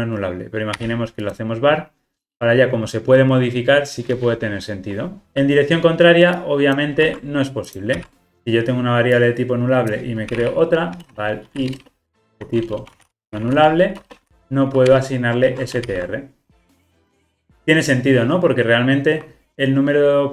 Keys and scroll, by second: 7.0 super+c, 7.9 super+v, 15.0 Return, 15.4 alt+super+l, 15.8 ctrl+alt+o.